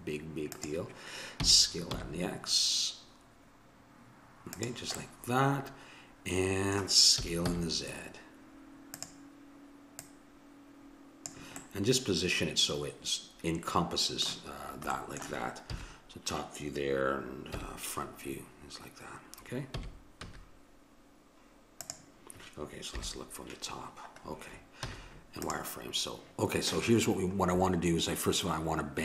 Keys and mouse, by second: 1.4 s, 5.0 middle click, 7.2 s, 10.0-12.3 drag, 11.6-13.4 middle drag, 11.6 right click, 14.5-15.7 middle drag, 15.7 KP_7, 17.5 KP_1, 19.8 s, 22.9 KP_7, 24.8 z.